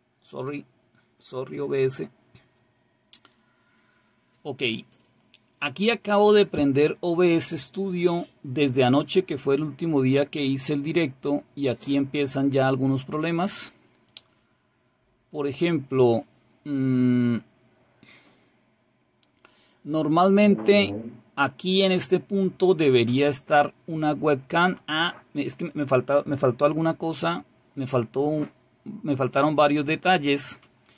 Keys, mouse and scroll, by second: 0.0 click, 14.1 click.